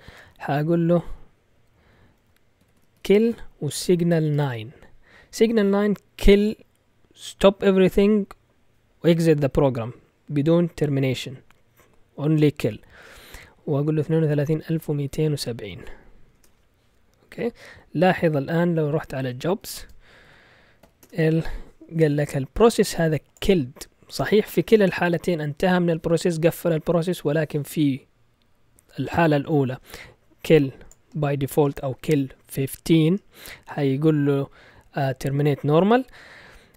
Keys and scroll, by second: 0.1 Up, 0.4 Up, 0.6 Up, 1.1 Down, 1.5 Down, 1.7 Down, 1.9 Down, 2.0 Down, 2.4-4.3 typing, 13.7-16.2 typing, 16.3 Return, 18.8-20.8 typing, 21.0 Return.